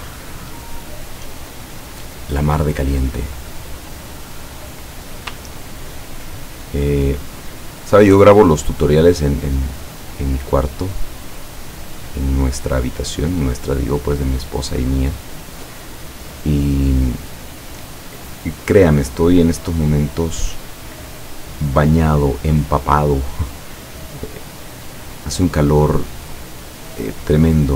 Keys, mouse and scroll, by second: 0.4 click, 1.4 click, 2.0 click, 4.1 click, 4.7 click, 5.5-6.0 ctrl+scroll up 2, 8.3 click, 9.9 click, 11.3 click, 12.6-14.2 drag, 15.0 click, 16.3 click, 18.3-20.3 drag, 24.8 click, 25.3-26.7 drag, 27.3 click.